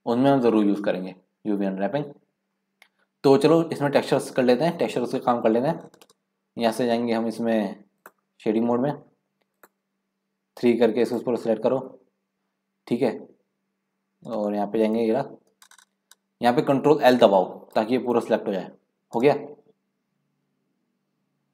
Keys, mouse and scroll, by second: 2.3 scroll up 5, 2.6-3.4 scroll down 6, 3.4-4.2 scroll up 1, 5.1 scroll down 4, 5.4-5.9 scroll up 3, 6.9-8.2 middle drag, 8.2 click, 8.4-8.9 scroll up 8, 9.5 click, 11.0 click, 11.5-12.3 scroll down 1, 12.3 scroll down 5, 12.3 middle click, 12.7-13.3 scroll up 2, 13.3-14.2 scroll down 1, 14.2-14.9 scroll down 3, 14.9 KP_Decimal, 15.4-15.8 scroll down 5, 17.8 ctrl+l, 19.1 scroll down 1, 19.7-21.1 scroll down 3.